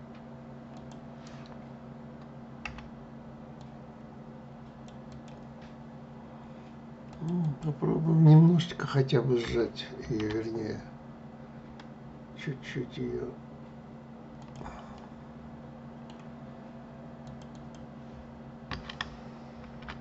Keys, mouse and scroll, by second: 0.4 click, 2.3 Delete, 6.8 click, 7.1 click, 9.7 ctrl+b, 14.6-16.9 middle drag, 16.9 click, 17.2 click, 19.3 ctrl+b.